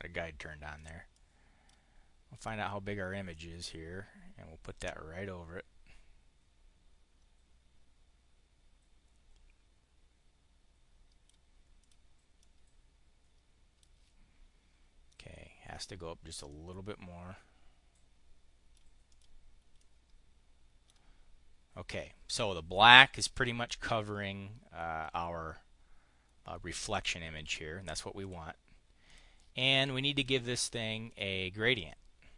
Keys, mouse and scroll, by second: 0.6 click, 2.1 click, 3.2 click, 7.9-11.2 drag, 11.6 click, 12.2-13.7 drag, 15.5 click, 16.4-18.7 drag, 18.9 click, 19.6-20.8 drag, 28.0 click, 28.9 click, 31.0 click.